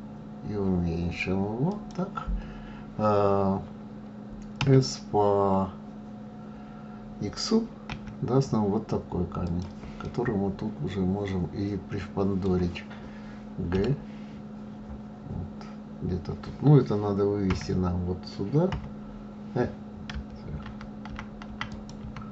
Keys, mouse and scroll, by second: 4.6 s, 10.0-13.0 middle drag, 13.7 g, 22.0 ctrl+z.